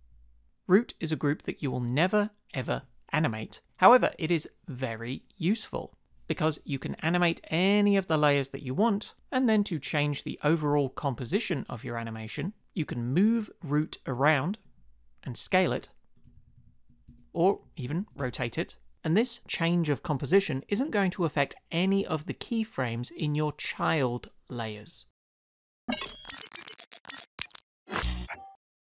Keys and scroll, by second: 16.4 shift+Down, 17.1 Return, 17.9 shift+Up, 18.2 Return.